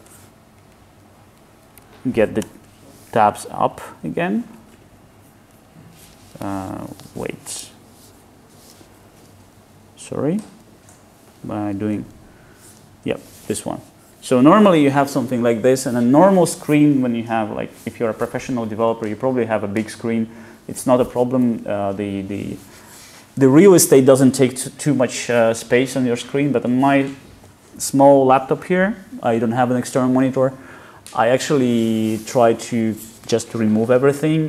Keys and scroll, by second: 7.8 alt+F1, 12.8 alt+F2.